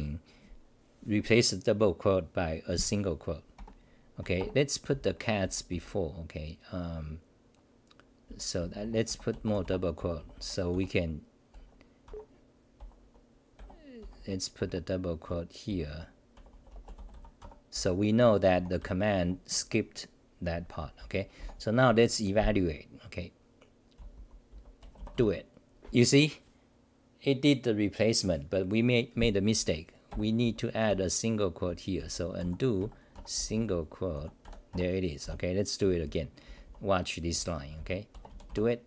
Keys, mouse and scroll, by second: 4.2 Home, 4.4 ctrl+g, 4.9-6.2 typing, 8.0-11.2 typing, 13.3-19.3 typing, 20.8-21.9 typing, 23.7-25.0 typing, 29.8-35.2 typing, 33.2 Home, 34.7 Home, 36.4 t, 36.6 t, 37.3 c, 37.7 c, 38.4 Delete.